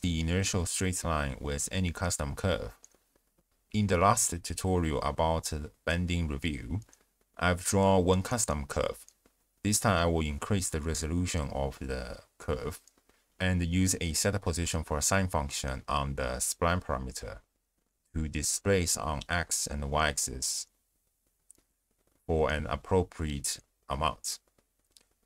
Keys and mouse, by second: 1.1 middle click, 2.3 middle click, 2.8-3.6 drag, 4.7 click, 11.4 shift+space, 11.9-13.7 drag, 14.2 ctrl+a, 15.4 ctrl+a, 17.1 click, 18.0 click, 18.3-18.7 drag, 19.3-19.9 drag, 20.1-20.5 drag, 20.8 click, 21.2 ctrl+shift+click, 21.6 click, 22.0 click, 22.5 click, 23.6 click, 24.6 click.